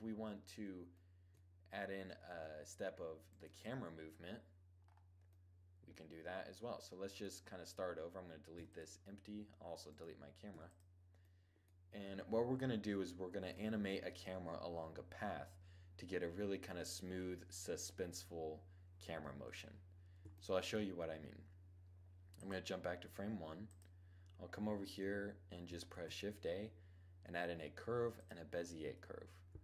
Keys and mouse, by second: 1.9 shift+z, 2.9-4.4 right drag, 4.4 click, 4.5 middle click, 6.7 right click, 7.0-8.1 middle drag, 8.1 x, 10.0 x, 11.6 7, 19.8-21.9 middle drag, 21.9-24.9 drag, 25.4 shift+a, 29.4-29.6 middle drag.